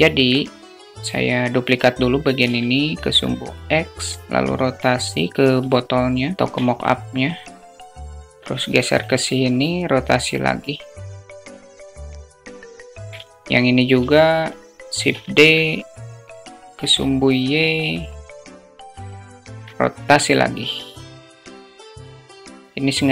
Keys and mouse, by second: 3.5-5.0 drag, 5.1-6.4 alt+middle drag, 7.2-8.4 drag, 9.3-10.4 drag, 10.7-11.3 alt+middle drag, 11.5 click, 12.0 click, 12.5 s, 13.0 alt+middle click, 14.3 shift+d, 18.4 alt+middle click, 19.6-20.7 drag, 20.9-21.3 shift+middle drag, 21.7-23.1 drag.